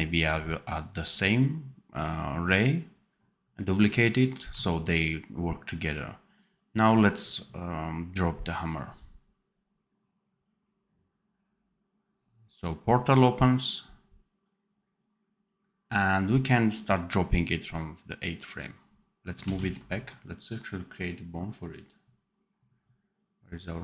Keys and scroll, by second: 19.5 ctrl+z.